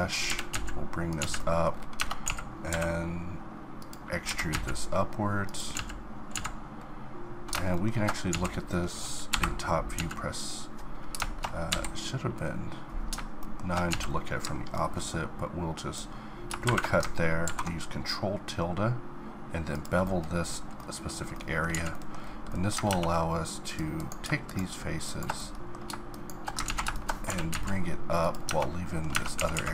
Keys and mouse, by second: 0.3 g, 1.2 z, 2.0 Tab, 2.3 a, 2.7 e, 4.2 g, 5.7 z, 6.3 z, 8.3 z, 9.3 KP_9, 10.0 z, 11.7 KP_7, 13.9 z, 14.9-16.6 middle drag, 17.4 ctrl+b, 20.1-21.7 middle drag, 21.7 z, 22.9 ctrl+Tab, 24.1-26.6 drag, 26.6 ctrl+z, 27.3 g, 28.5 Tab, 29.1 Tab, 29.3 a, 29.5 a.